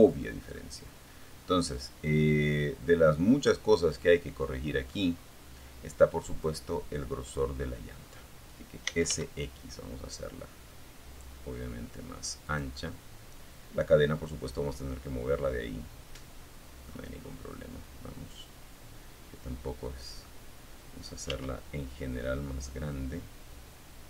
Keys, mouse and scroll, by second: 3.4-3.8 scroll up 2, 4.6 right click, 6.8-7.7 typing, 10.6 click, 13.0 scroll down 1, 13.4-15.2 middle drag, 15.3 scroll up 1, 15.7-18.6 middle drag, 19.4 s.